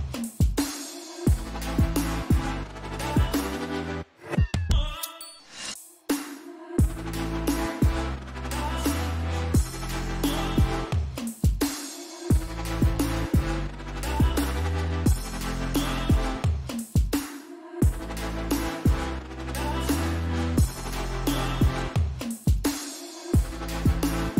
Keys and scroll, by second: 0.7 ctrl+t.